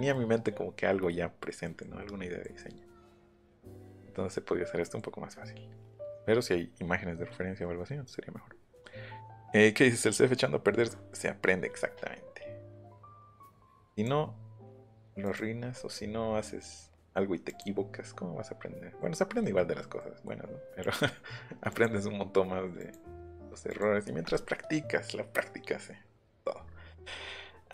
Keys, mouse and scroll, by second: 1.7 Menu, 13.9 click, 15.2 click, 16.9 click, 17.4 click, 18.9 scroll down 1, 19.4-19.9 scroll up 2, 20.8 click, 21.7 click, 22.7 click, 23.6 click.